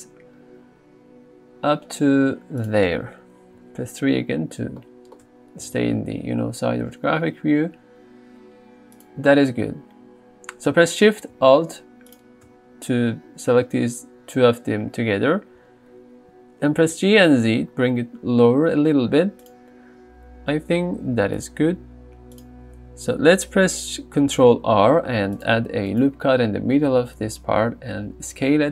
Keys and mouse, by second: 2.6 click, 3.6 KP_3, 5.6 g, 6.0 z, 9.0 click, 16.9 g, 17.2 z, 19.4 click, 21.1 g, 21.4 z, 22.4 click, 24.6 ctrl+r, 25.4 click, 28.4 s.